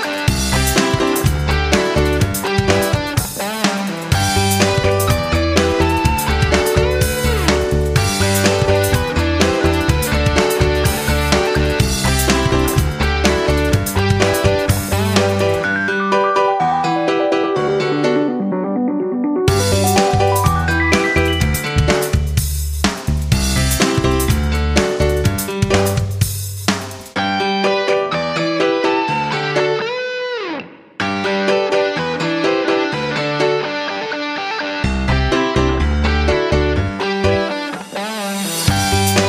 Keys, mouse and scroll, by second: 9.9 ctrl+g, 10.9-13.6 shift+drag, 13.9 shift+click, 16.6 F9, 19.6-22.3 drag, 22.3 F9, 23.2 right click, 24.1-35.6 drag.